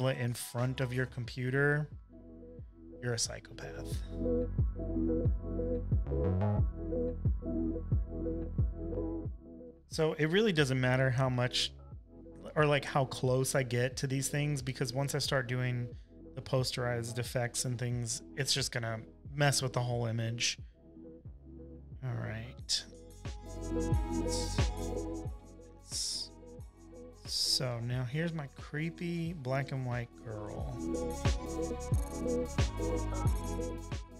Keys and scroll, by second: 4.4 space, 27.2 super+j, 29.7-32.3 typing, 31.1 super+-, 31.2 super+-.